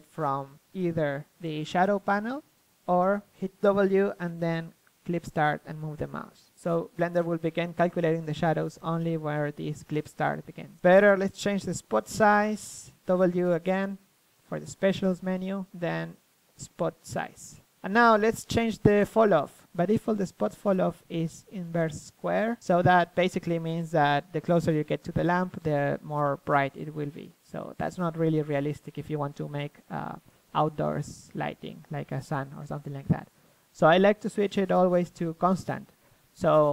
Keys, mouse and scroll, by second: 1.0-2.4 drag, 2.4 middle click, 2.5 click, 3.1-7.9 middle drag, 9.0 KP_1, 10.0 r, 10.7-13.1 drag, 10.8 KP_3, 11.5 r, 13.2 w, 13.8-15.9 middle drag, 15.9 KP_1, 16.2 g, 16.7 KP_3, 17.8 r, 19.2-21.1 drag, 25.9-27.9 drag, 36.5 middle click.